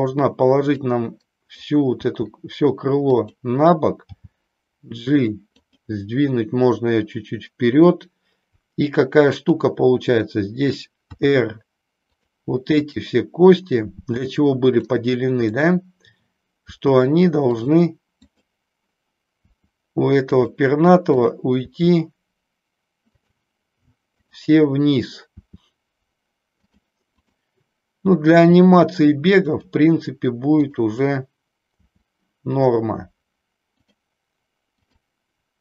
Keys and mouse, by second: 0.9 click, 2.0 r, 4.1 g, 5.6 click, 9.3 click, 11.1 r, 12.1 click, 12.8 click, 13.9 r, 15.5 click, 17.6 click, 18.1 click, 21.1 click, 22.0 r, 23.3 click, 24.1 click, 25.4 r, 27.1 click, 28.3 r, 29.6 click, 30.5 click, 31.8 r, 33.9 click, 34.6 click.